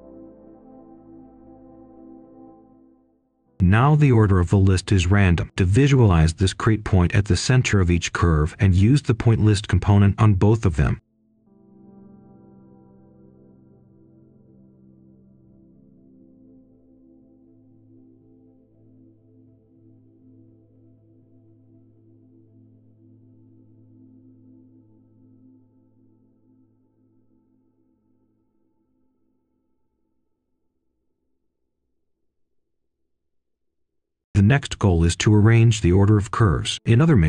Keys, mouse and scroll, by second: 0.6 right click, 1.2 click, 1.3-2.4 typing, 4.6-6.8 typing, 7.5-10.5 drag, 9.7-10.5 typing, 11.5 Return, 12.2 click, 14.5 ctrl+c, 14.8 ctrl+v, 15.2-17.5 drag, 19.0 ctrl+right click, 19.8-21.4 drag, 22.2 right click, 22.9-23.6 scroll up 1, 23.6-24.1 scroll down 1, 24.1 right click, 25.3 scroll down 1, 25.6 scroll up 1, 25.8 right click, 26.3 scroll down 1, 26.5-27.9 scroll up 1, 28.6-30.8 drag, 30.8-31.1 scroll down 1, 31.1 right click, 31.4 scroll down 1, 31.7 scroll up 1, 31.9 right click, 32.2-32.7 scroll down 1, 32.7-33.0 scroll up 1, 33.0 click, 34.5 right click, 35.6 click, 36.5 scroll down 1, 36.7 scroll up 1, 36.9 right click.